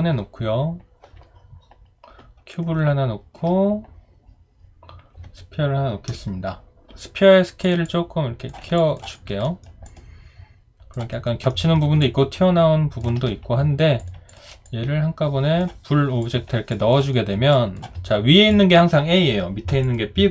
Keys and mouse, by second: 2.9 alt+click, 8.8 alt+click, 9.1 alt+right click, 9.4 alt+middle click, 9.9 alt+click, 11.1 alt+right click, 11.5 alt+middle click, 12.0 alt+click, 16.7 alt+click, 17.1 alt+right click, 17.5 alt+click.